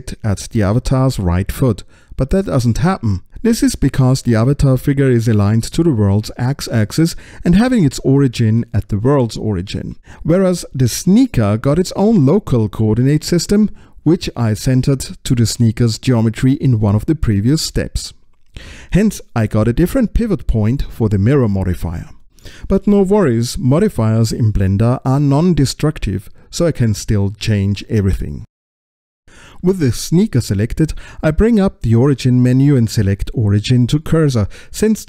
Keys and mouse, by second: 0.0 click, 30.4 ctrl+alt+x, 32.6 click, 34.7 ctrl+alt+x.